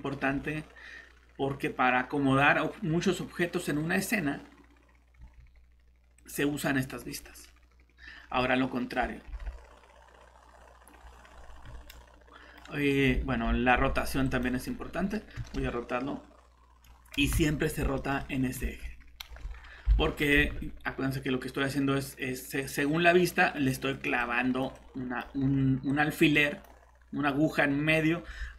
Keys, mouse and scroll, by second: 5.2 Escape, 6.2 click, 8.4 middle click, 9.3 g, 11.6 Escape, 14.2 click, 15.4 r, 17.2 Escape, 17.5-17.8 scroll up 1, 18.0 middle click, 19.2 shift+r, 20.0 alt+Tab, 20.4 Escape, 20.5 Escape, 22.6 click.